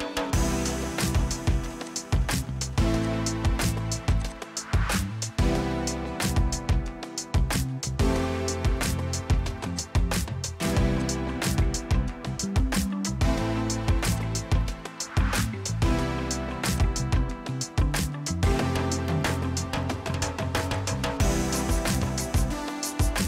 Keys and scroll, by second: 5.2 ctrl+g, 10.5 f, 11.8-12.7 typing, 12.8 Return, 13.9 typing, 15.0 typing, 16.4 m, 18.6-19.8 typing, 21.3 m, 22.7-23.2 typing.